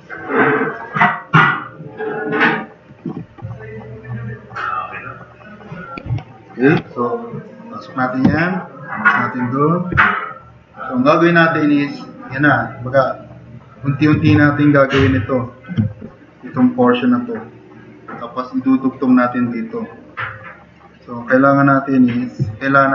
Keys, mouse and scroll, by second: 0.1 click, 0.6 drag, 1.4 drag, 1.8-2.4 drag, 7.1-8.0 drag, 8.2 e, 8.6-9.6 drag, 10.0 drag, 10.7 click, 11.1-11.5 drag, 11.7 click, 12.6-13.6 drag, 15.0 shift+F6, 16.0 click.